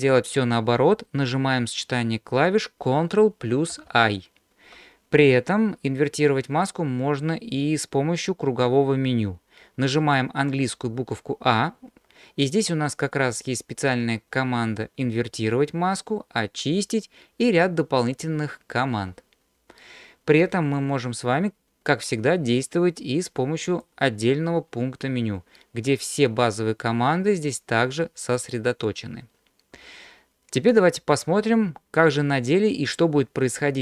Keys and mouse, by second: 3.7 ctrl+i, 10.9 a, 23.9 click.